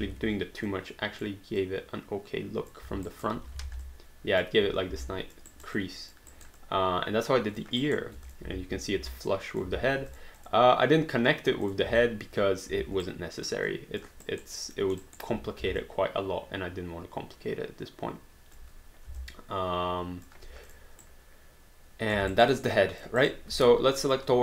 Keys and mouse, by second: 0.0 ctrl+z, 0.7 click, 3.1 alt+right click, 3.4 q, 3.7 alt+d, 3.9 alt+click, 5.0 alt+click, 5.5 alt+right click, 5.8 alt+click, 6.3 alt+right click, 6.6 alt+click, 7.8 alt+right click, 8.3 click, 9.3 alt+click, 9.7 alt+d, 10.1 click, 11.7 click, 12.1 alt+click, 12.7 alt+d, 13.0 alt+right click, 13.7 alt+click, 14.3 alt+right click, 14.8 alt+middle click, 15.1 alt+right click, 15.8 alt+click, 18.6 click, 19.2 alt+click, 20.7 click, 21.0 right click, 22.4 alt+right click, 22.6 alt+click, 23.2 alt+right click, 23.6 q, 24.0 click.